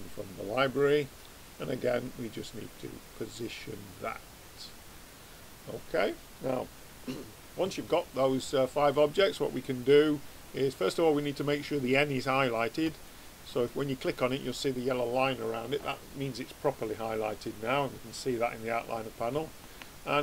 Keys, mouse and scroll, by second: 4.6-12.9 middle drag, 12.9 click, 17.2-20.2 middle drag.